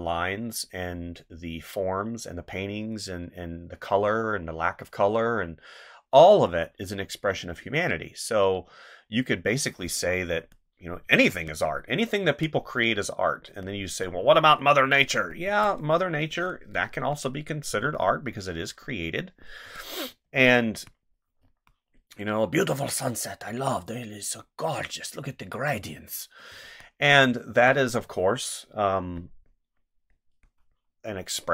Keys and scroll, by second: 10.3 space, 14.2 space, 15.4 space, 17.8 space, 19.6 space, 26.5 space.